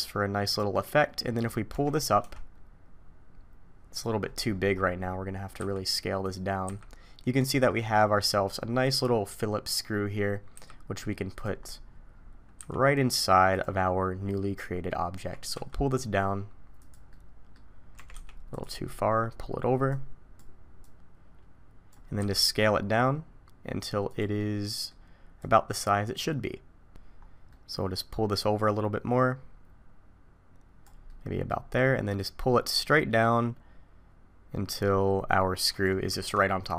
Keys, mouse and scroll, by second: 1.7 g, 4.2-5.7 scroll down 18, 5.7-6.2 scroll down 5, 5.7 s, 6.6 s, 7.7-9.5 scroll up 6, 10.5 s, 11.6-13.5 scroll up 13, 12.6 s, 13.8-14.9 scroll up 1, 14.9 scroll up 1, 15.2 g, 17.1 middle click, 17.9 g, 19.9 click, 20.8 click, 22.2 s, 24.4 middle click, 25.4 click, 27.5 scroll up 2, 28.3 click, 31.1 middle click, 32.2 click.